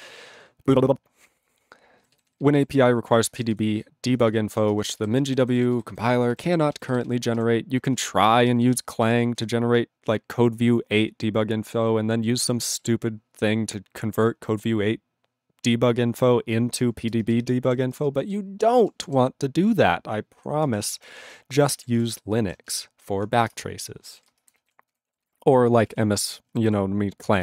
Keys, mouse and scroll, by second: 2.0 alt+b, 2.1 alt+b, 2.4 alt+b, 2.5 alt+b, 3.0 alt+f, 3.2 alt+f, 3.3 alt+f, 3.5 alt+f, 4.1 alt+f, 4.9 ctrl+space, 5.1 ctrl+alt+b, 5.4 ctrl+alt+b, 5.6 ctrl+alt+b, 5.7 ctrl+alt+b, 5.9 ctrl+alt+b, 6.5 alt+b, 6.7 alt+b, 6.9 alt+b, 7.0 alt+b, 7.5 ctrl+g, 7.9 ctrl+space, 8.0 ctrl+e, 8.2 ctrl+g, 8.5 ctrl+b, 8.6 ctrl+b, 8.8 ctrl+space, 9.2 ctrl+alt+b, 9.4 ctrl+g, 9.9 ctrl+g, 17.1 ctrl+space, 17.5 ctrl+alt+f, 17.7 ctrl+g, 17.9 ctrl+space, 18.6 ctrl+alt+b, 19.1 ctrl+g, 20.6 ctrl+space, 21.1 ctrl+alt+f, 21.2 ctrl+g, 21.9 ctrl+s, 23.5 ctrl+Return, 24.1 ctrl+s, 24.3 ctrl+space, 24.7 ctrl+alt+b, 24.9 ctrl+g, 25.2 ctrl+s, 25.9 ctrl+e, 26.6 ctrl+s.